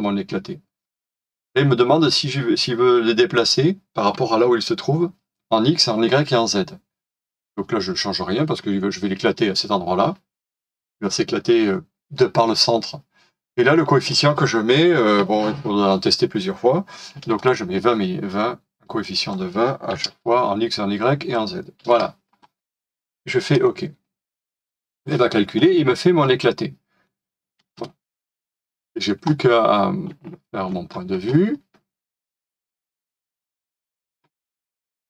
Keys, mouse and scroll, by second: 16.9-17.7 typing, 19.7-20.5 typing, 21.8 typing, 25.7-26.1 scroll down 1, 26.2 scroll down 1, 26.2 middle click, 27.7 space, 28.3 middle click, 30.4 middle click.